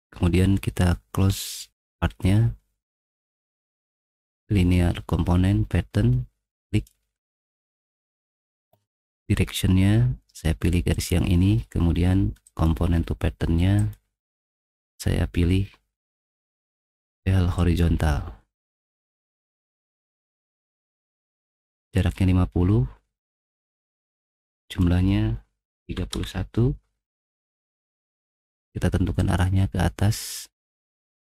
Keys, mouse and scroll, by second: 1.8 click, 2.1 middle click, 2.9-3.9 middle drag, 6.7 click, 7.7 middle click, 8.7 middle click, 10.2 middle click, 12.4 click, 13.8 click, 14.9-16.0 drag, 16.6 middle click, 17.6 click, 17.8 middle click, 20.3 click, 20.8 click, 21.1 middle click, 24.1 click, 24.5 click, 25.8-26.3 typing, 28.3 middle click, 29.3 click, 30.1 middle click.